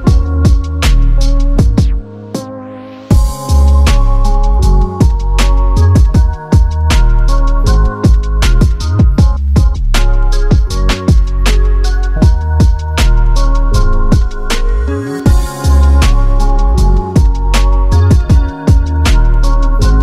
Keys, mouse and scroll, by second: 0.1 middle click, 0.5 scroll down 3, 0.6 middle click, 1.1-1.6 scroll up 8, 1.8 typing, 3.2 double click, 3.2 double click, 3.3 right click, 4.9 Delete, 5.6 Delete, 5.7-6.2 scroll down 5, 6.4 Delete, 7.1 Delete, 7.2 middle click, 8.6 double click, 9.0-10.5 typing, 9.9 Return, 11.2-11.6 scroll up 5, 11.7 right click, 13.5 typing, 13.8-14.8 scroll down 1, 17.2-18.1 typing, 19.5 Delete.